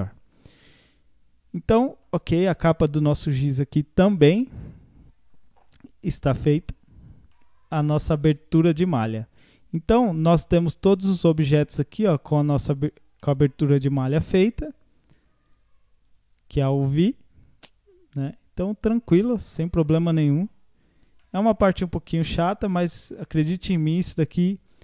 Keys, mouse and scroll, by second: 0.1 scroll down 3, 0.8-3.4 middle drag, 3.4 ctrl+s, 6.2 click, 6.6 click, 7.1 scroll down 1, 7.3-8.8 middle drag, 8.8 click, 11.2 click, 12.6 click, 13.2-15.5 middle drag, 15.5 click, 16.1 click, 18.8 click, 19.2-19.9 scroll down 8, 20.1-20.5 middle drag, 20.5-21.2 scroll down 3, 21.2-22.3 middle drag, 22.3-22.7 scroll up 2, 22.7-24.3 middle drag, 24.3 click, 24.7 click.